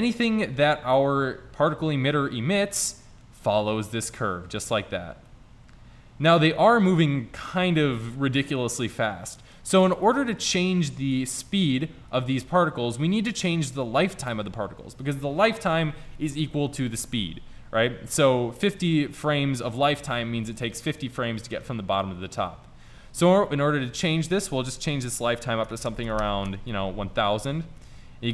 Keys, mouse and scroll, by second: 1.9-3.4 middle drag, 5.5-7.0 middle drag, 7.4 middle click, 9.2-9.8 middle drag, 10.2-10.6 middle drag, 12.2 right click, 15.2 click, 26.2 KP_0, 26.4 KP_0, 27.6 middle drag.